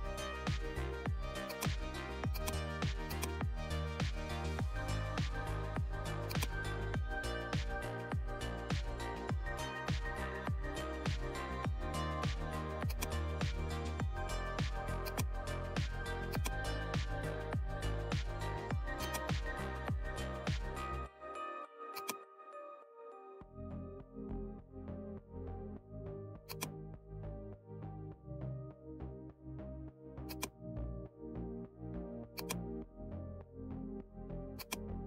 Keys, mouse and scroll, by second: 1.4-6.2 drag, 6.2-10.0 drag, 12.8-21.9 drag, 21.9-26.4 drag, 26.4-32.3 drag, 32.3-35.0 drag.